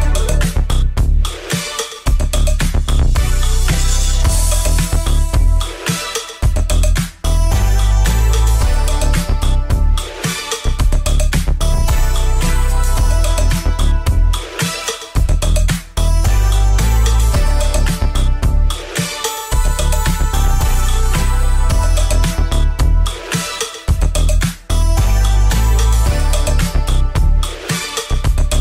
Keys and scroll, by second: 0.0 Return, 0.9 Return, 4.1 Return, 6.5 KP_1, 6.6 Return, 8.1 ctrl+z, 8.3 KP_2, 8.4 Return, 9.0 KP_3, 9.0 Return, 10.4 ctrl+z, 10.7 KP_3, 10.8 Return, 11.7 KP_1, 11.8 Return, 12.2 KP_2, 12.3 Return, 13.5 Left, 13.7 l, 13.8 Return, 15.3 ctrl+KP_1, 19.3 ctrl+c, 19.4 Left, 20.0 ctrl+z, 22.6 ctrl+c, 23.4 space, 23.5 f, 23.7 space, 24.4 space, 24.8 ctrl+KP_1, 25.4 ctrl+KP_1, 26.8 space, 27.0 space, 27.7 ctrl+c.